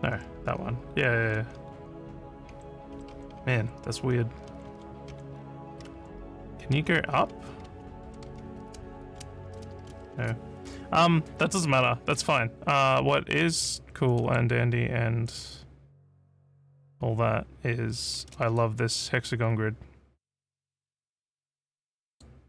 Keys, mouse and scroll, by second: 0.0-10.0 typing, 11.8 scroll up 1, 14.2 click, 18.6-22.2 alt+drag.